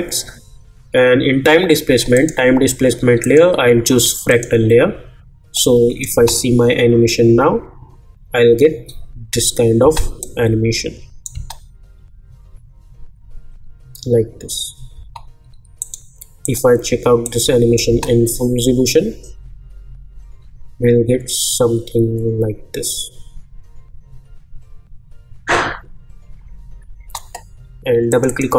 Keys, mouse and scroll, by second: 2.1 click, 6.1 space, 9.8 space, 10.2 click, 11.3 space, 14.9 space, 15.8 click, 17.9 space, 26.9 space, 28.1-28.5 drag.